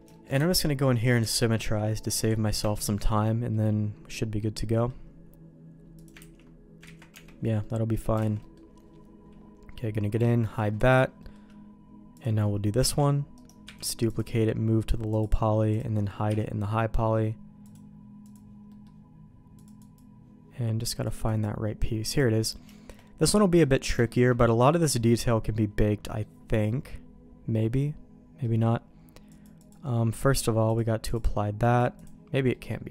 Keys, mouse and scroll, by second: 0.1 shift+middle click, 0.5 alt+x, 2.2 click, 2.6 Tab, 2.9 middle click, 3.5-4.9 middle drag, 6.0 click, 6.2 ctrl+x, 7.0 ctrl+z, 7.1 Tab, 7.6 middle click, 8.2 alt+a, 8.4 middle click, 10.1 click, 11.2 middle click, 12.2 click, 13.0 shift+d, 13.6 m, 15.1 click, 15.7 click, 16.3 h, 17.6 click, 18.2 click, 18.7 middle click, 19.6 click, 21.0 click, 22.1 click, 22.4 middle click, 22.7 shift+middle click, 23.3 middle click, 24.0 shift+middle click, 24.5 middle click, 25.3 middle click, 26.0 middle click, 26.8-28.4 middle drag, 29.4-31.2 drag, 31.7 click, 32.5 middle click.